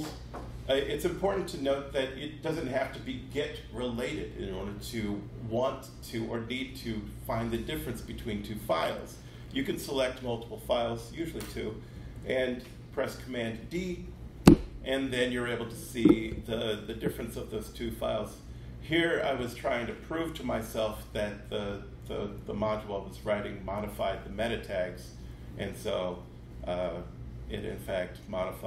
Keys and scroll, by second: 11.9 super+d.